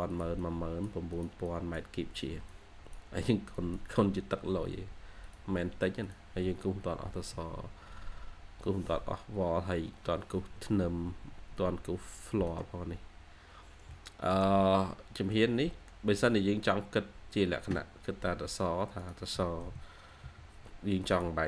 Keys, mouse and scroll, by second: 1.3 double click, 6.4-6.8 scroll up 1, 7.2 middle click, 13.4-13.8 scroll down 1, 15.9-16.9 scroll down 1, 21.3 scroll down 1.